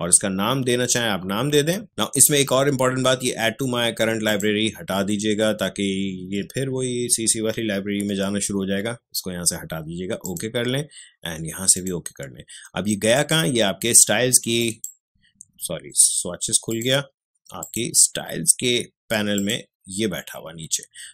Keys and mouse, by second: 4.2 click, 10.2 click.